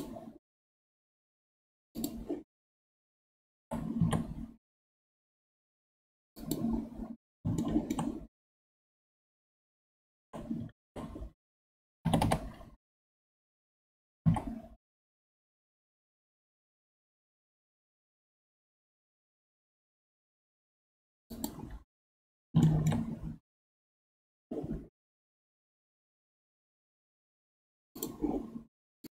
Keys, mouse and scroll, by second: 1.9 click, 3.5 g, 7.1 scroll up 5, 7.6 shift+middle click, 8.2-9.7 scroll up 1, 9.7-10.1 scroll down 7, 10.7 ctrl+z, 12.0 g, 21.7-22.2 scroll up 7, 22.6 shift+middle click, 23.2-26.0 scroll up 3, 26.0-28.0 scroll down 13.